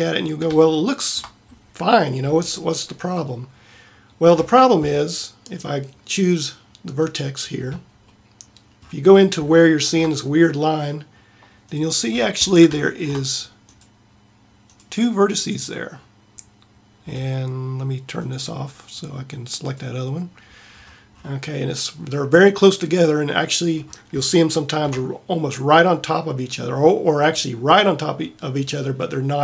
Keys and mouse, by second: 11.8 middle click, 13.1-23.8 middle drag, 24.3-29.1 middle drag.